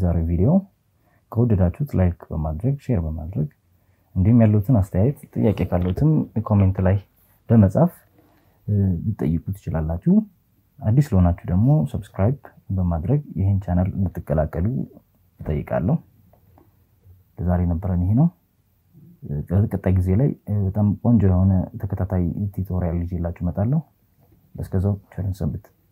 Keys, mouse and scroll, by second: 7.6 click.